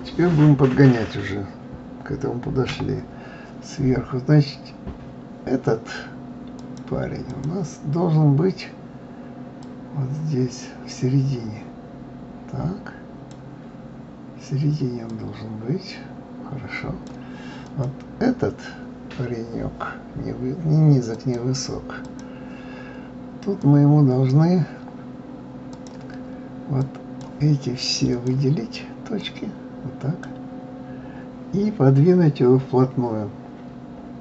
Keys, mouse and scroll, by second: 2.6 KP_7, 3.5-4.3 scroll up 1, 6.6-12.6 drag, 15.1-17.8 drag, 21.1-23.7 drag, 25.7-27.2 drag, 28.1 click, 29.2 click.